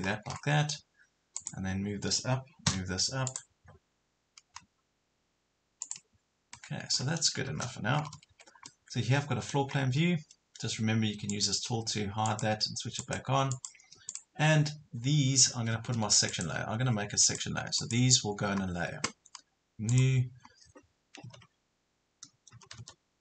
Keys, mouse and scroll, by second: 0.1 scroll down 1, 1.3 click, 2.7 m, 3.3 click, 6.6 middle click, 7.5-8.1 scroll up 2, 7.9 Escape, 8.2 Escape, 8.7 middle click, 9.8 scroll down 1, 11.3-13.0 drag, 15.5 Escape, 17.3 click, 21.3 s, 22.5-23.2 typing.